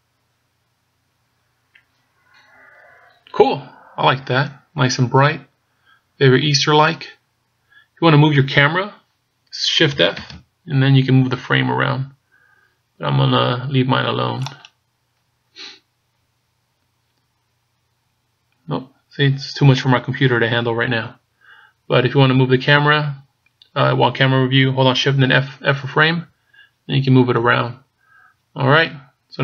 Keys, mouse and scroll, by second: 10.6 shift+f, 15.6 right click.